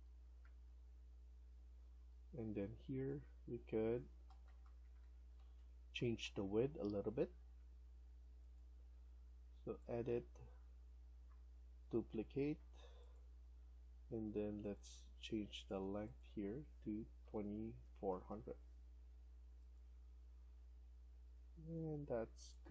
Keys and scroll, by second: 0.3 Up, 0.3 Right, 0.5 Right, 1.7 Escape, 1.7 Up, 2.1 Escape, 4.1 Left, 4.3 Left, 4.5 Left, 4.7 Left, 4.9 Left, 5.1 Left, 5.3 Left, 5.4 Left, 6.1 Down, 6.5 Left, 7.0 Escape, 7.2 Escape, 17.1-18.0 typing, 21.0 Escape, 21.3 Escape.